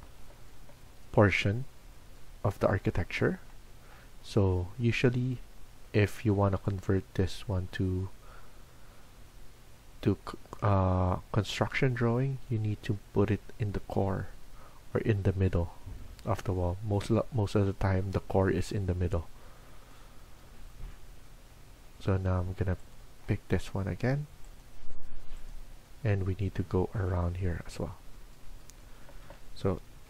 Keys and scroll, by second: 0.1 Escape, 0.7 Escape, 28.9 Escape, 29.1 Escape, 29.6-30.0 typing.